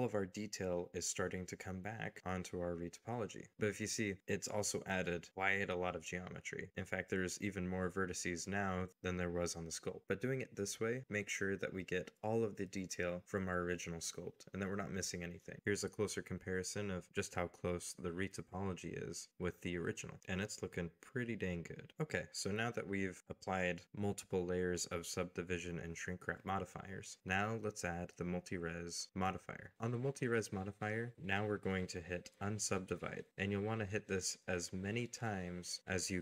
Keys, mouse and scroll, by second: 0.0 ctrl+a, 1.1-2.1 scroll down 1, 2.2 ctrl+a, 5.6 Tab, 7.7 middle click, 8.2 scroll up 1, 10.4 scroll down 1, 11.2 scroll up 1, 11.7 scroll down 1, 13.4 shift+middle click, 14.0 middle click, 15.5 a, 19.9 shift+middle click, 20.2 scroll up 2, 20.9 shift+middle click, 22.4-24.5 scroll down 1, 25.3 g, 26.1 y, 27.0 middle click.